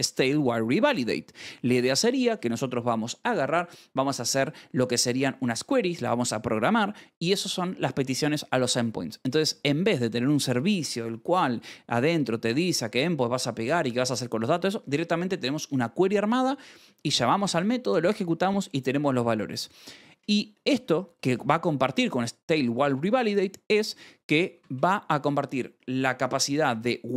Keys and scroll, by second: 0.0-1.2 typing, 0.9 Escape, 20.5 shift+v, 21.0 j, 22.4 Escape, 24.1-25.2 typing, 25.2 Escape.